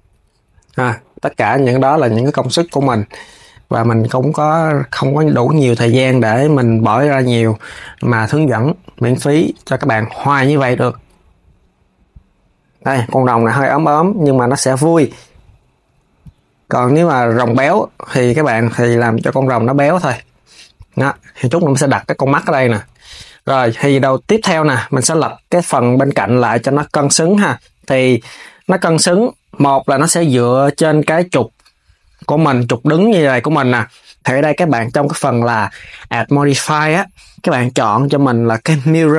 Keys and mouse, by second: 0.0 s, 1.5 click, 2.2 shift+click, 2.4 KP_3, 3.0 g, 6.6 click, 6.9 KP_3, 7.4 g, 9.7 click, 9.9 KP_3, 10.3 g, 13.2 s, 15.2 click, 15.5 KP_3, 16.0 g, 20.7 s, 22.6 s, 24.9 click, 26.3 s, 27.8 KP_1, 34.2-39.1 drag.